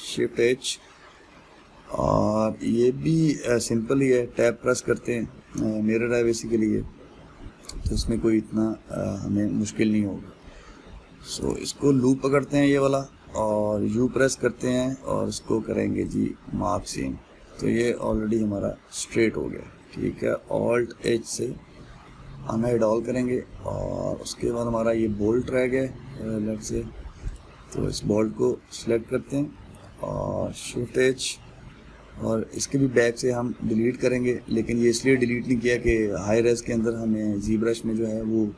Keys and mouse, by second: 0.9 shift+h, 1.4-4.6 middle drag, 4.6 Tab, 5.2-12.0 middle drag, 12.0 alt+click, 12.4-16.7 middle drag, 16.7 u, 18.1-19.2 middle drag, 19.2 Tab, 20.3-21.4 ctrl+middle drag, 21.4 alt+h, 22.4-27.9 ctrl+middle drag, 27.9 click, 28.6-31.4 middle drag, 31.4 shift+h, 32.3-38.5 middle drag.